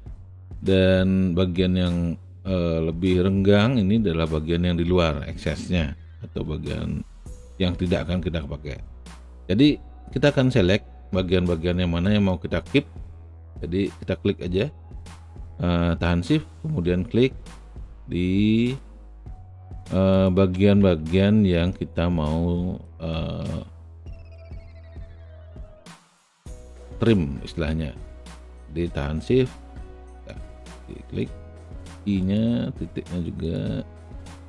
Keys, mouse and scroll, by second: 11.4 alt+right click, 12.2-13.6 alt+middle drag, 16.6 shift+click, 21.1-22.1 alt+shift+middle drag, 22.1 alt+shift+right click, 22.5 alt+shift+middle click, 22.6 alt+shift+right click, 22.9-27.1 alt+shift+drag, 27.2 alt+shift+middle click, 27.4 alt+shift+middle click, 27.6 alt+shift+click, 27.7-34.4 alt+shift+middle drag.